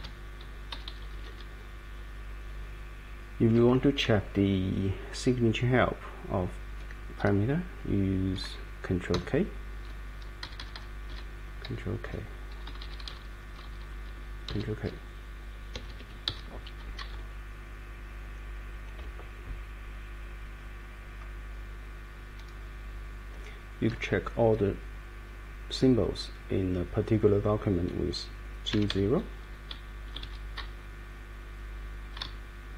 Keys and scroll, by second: 0.0-0.3 typing, 0.7 Right, 0.9 Right, 1.0 Right, 1.2 Right, 1.3 Right, 9.1 ctrl+k, 10.4 Right, 10.6 Right, 10.7 Right, 11.1 Right, 12.0 ctrl+k, 12.7 Right, 13.5 Right, 14.5 ctrl+k, 15.7 Escape, 16.3 Up, 16.8 Down, 17.1 Up, 17.6 Up, 18.2 Up, 28.4-29.4 typing, 29.7 Down, 31.8 Down, 32.2 Up.